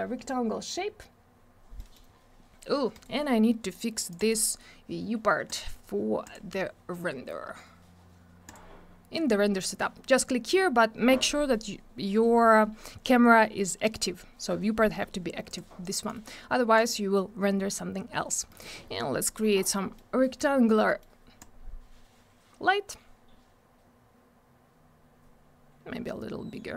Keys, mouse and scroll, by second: 1.7 middle click, 2.1 scroll down 1, 2.9 right click, 4.1 click, 5.5 click, 8.4 click, 15.5 click, 17.8 scroll down 1, 18.8-19.6 scroll down 3, 19.2 middle click, 19.3 middle click, 19.7 middle click, 20.2 middle click, 20.5-20.9 scroll up 1, 20.9 middle click, 21.4 click.